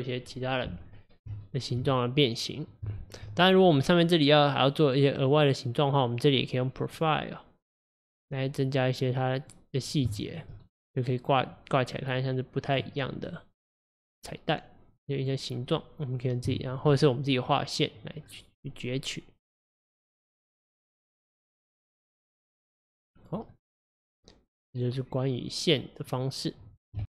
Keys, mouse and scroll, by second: 0.9 scroll down 4, 1.5-3.3 shift+middle drag, 3.3-5.2 scroll up 6, 5.2 click, 6.9 click, 7.9 scroll down 6, 8.8-10.2 drag, 10.2-12.2 shift+middle drag, 12.2-16.6 drag, 16.6 shift+middle click, 18.3 scroll down 1, 18.8-20.9 middle drag, 20.9 scroll down 4, 22.9-23.2 scroll down 1, 23.2 click, 23.6-26.6 middle drag.